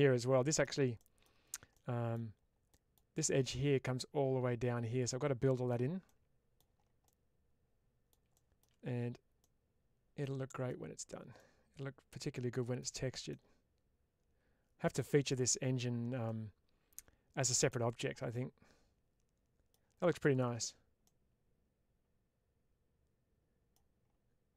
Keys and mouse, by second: 0.1-0.5 middle drag, 1.0 middle click, 1.6-2.0 middle drag, 2.6 middle click, 6.1-6.4 middle drag, 7.0-8.0 middle drag, 9.3-10.6 middle drag, 11.4-12.7 middle drag, 13.2-14.9 middle drag, 16.2-17.6 middle drag, 18.3-19.6 middle drag, 21.0-23.6 middle drag.